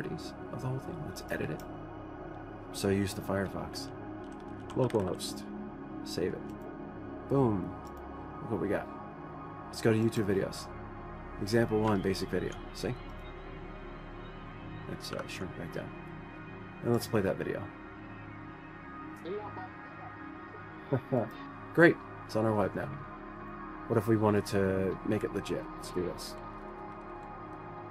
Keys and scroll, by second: 4.7-6.1 typing, 15.7 ctrl+0, 25.7-26.4 Up, 26.6 Up, 26.6 Up, 27.1 Return, 27.2 Return, 27.5 Up, 27.6-27.9 Up.